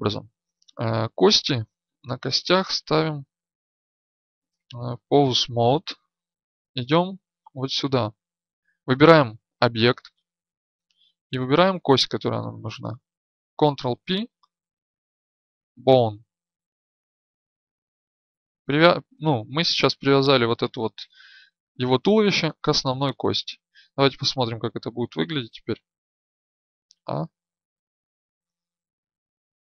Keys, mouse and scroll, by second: 6.0 right click, 13.4 ctrl+p, 25.7 right click, 26.9 a.